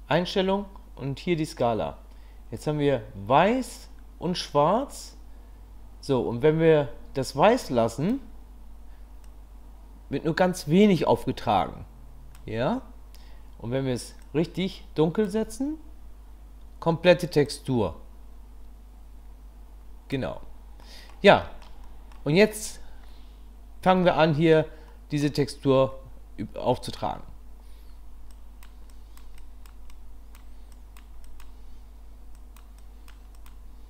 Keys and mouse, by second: 2.6-8.2 drag, 9.2-12.3 drag, 14.2-15.4 drag, 17.5-20.1 drag, 20.8 middle click, 21.4 shift+middle click, 21.8 middle click, 23.9 middle click, 24.9 middle click, 26.7 middle click, 28.4 click, 28.9 click, 29.4 click, 29.9 click, 30.7 click, 31.2 click, 32.4 click, 32.8 click, 33.4 click.